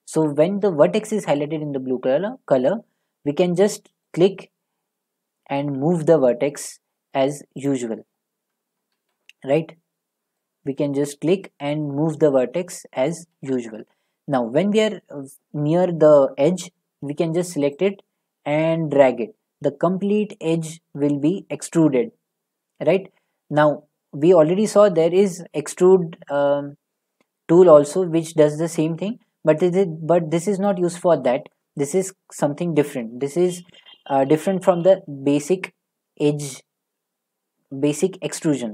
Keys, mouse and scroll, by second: 7.1 click, 8.1 right click, 8.9 ctrl+z, 12.2 click, 13.4 ctrl+z, 25.2 click, 27.2-28.4 drag, 30.6-33.7 drag, 34.3 ctrl+z, 34.7 ctrl+z, 36.2 click.